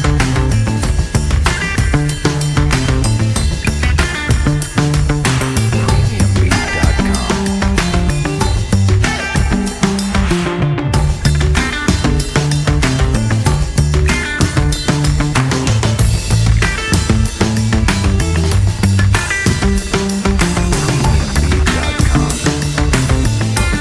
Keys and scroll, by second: 2.0 F4, 18.8 F4, 20.1 F4, 20.7 ctrl+t, 22.1 Delete.